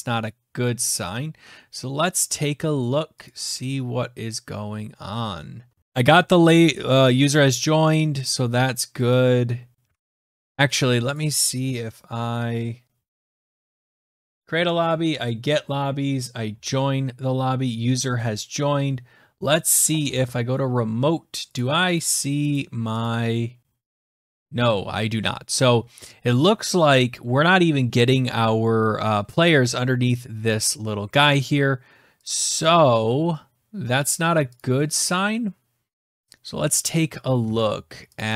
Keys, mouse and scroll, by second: 3.2 click, 7.5 click, 9.0 click, 9.7 alt+Tab, 11.0 click, 13.7 click, 14.0 click, 19.8 click, 21.4 click, 21.8 click, 22.4 click, 22.9 click, 23.5-23.8 scroll down 5, 24.2 click, 32.5 click, 33.9 click, 34.4 click, 35.9 click, 37.3 alt+Tab, 38.0 click.